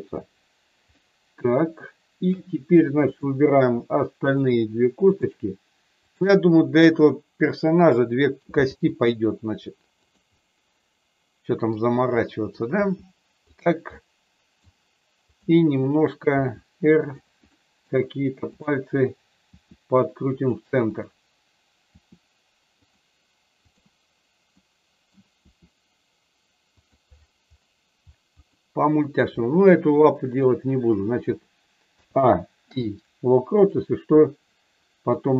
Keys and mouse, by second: 1.0-2.3 middle drag, 3.2 click, 4.9 shift+click, 7.1-8.3 middle drag, 8.6 r, 10.3-11.7 middle drag, 12.8 r, 13.9 middle click, 15.3 click, 16.2 r, 17.1 click, 17.5 middle click, 18.6 click, 19.5 r, 20.9 click, 21.8 r, 22.8 click, 23.7 click, 24.5 middle click, 25.3 r, 26.7 click, 28.4 middle click, 29.9 middle click, 31.8 a, 32.5 i, 34.2-35.2 middle drag.